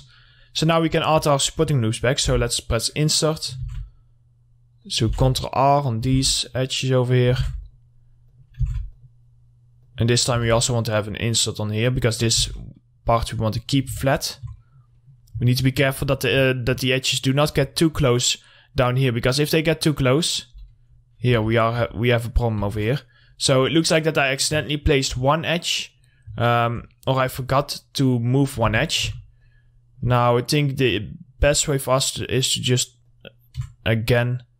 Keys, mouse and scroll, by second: 0.0 middle click, 0.4-0.8 scroll up 1, 0.8 middle click, 1.0-1.7 scroll up 1, 1.7 middle click, 3.0 click, 3.8 ctrl+r, 4.0 click, 5.3 ctrl+r, 5.5 click, 6.4 ctrl+r, 6.5 click, 7.6 ctrl+r, 7.8 click, 8.8 ctrl+r, 9.1 click, 10.6 ctrl+r, 10.8 click, 12.6 ctrl+r, 12.8 click, 14.0 scroll down 1, 14.3 alt+middle click, 15.4 scroll up 1, 15.7 alt+middle click, 16.1 middle click, 16.4 scroll up 1, 16.7 middle click, 17.3 click, 17.8 middle click, 18.0 scroll down 1, 18.3 middle click, 20.7-21.4 scroll up 2, 21.5 ctrl+z, 23.5-24.4 scroll down 1, 24.4 middle click, 24.8 alt+middle click, 25.4 alt+scroll up 2, 26.1 click, 26.6 alt+middle click, 27.1 middle click, 27.7-28.1 scroll up 1, 28.6 middle click, 28.9 1, 29.9 click, 31.1 ctrl+click, 31.8-33.3 ctrl+drag, 33.3 ctrl+click, 34.4-34.5 drag.